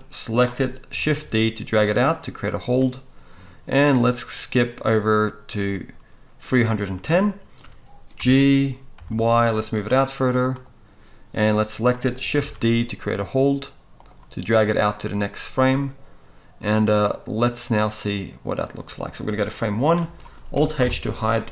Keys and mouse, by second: 0.9 shift+d, 2.6-3.9 middle drag, 3.9-10.6 drag, 8.2 g, 10.6 middle click, 11.4-14.0 drag, 12.3 shift+d, 14.0-16.6 middle drag, 16.6-21.5 drag, 20.8 alt+h.